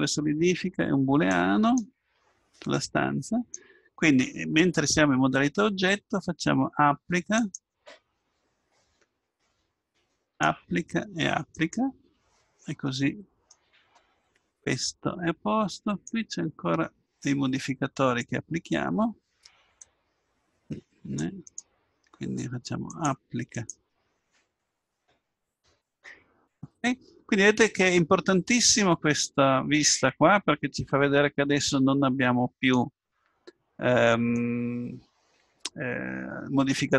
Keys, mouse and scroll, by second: 1.3-3.1 drag, 10.3-13.4 drag, 13.4-15.9 middle drag, 15.9-19.3 drag, 19.8-25.5 drag, 29.1-30.9 middle drag, 30.9-32.7 drag, 34.3-36.2 drag.